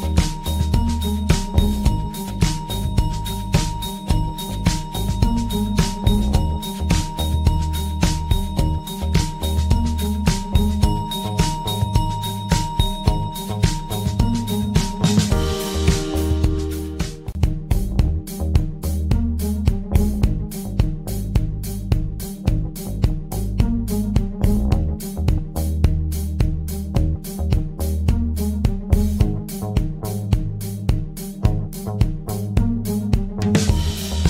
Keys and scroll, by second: 29.7 ctrl+s.